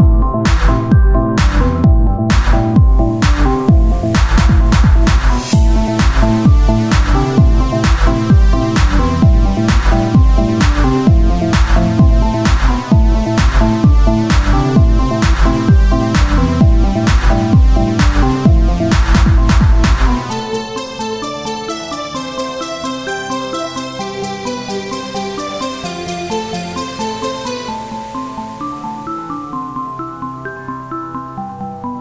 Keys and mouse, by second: 6.4 click, 6.6 Tab, 7.8 ctrl+Tab, 10.3 e, 12.7 f, 13.6 ctrl+r, 14.9 Tab, 16.3-17.5 drag, 17.5 Tab, 18.9 e, 21.0 z, 22.2 ctrl+Tab, 24.3-26.1 drag, 24.8-26.1 right drag, 26.1 z, 27.7 f, 28.1 Tab, 30.2 Tab, 31.4 ctrl+r.